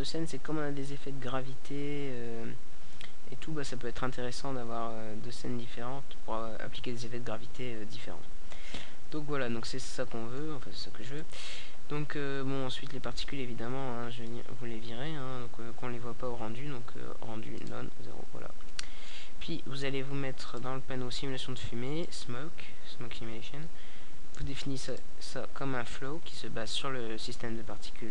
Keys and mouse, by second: 1.1 alt+a, 1.8 click, 1.9-3.6 middle drag, 3.6-5.3 right drag, 5.8 middle click, 6.7-8.2 right drag, 8.1 click, 8.2-11.2 middle drag, 11.2-21.4 drag, 21.4-22.9 right drag, 22.9-25.0 middle drag, 25.0-28.1 drag.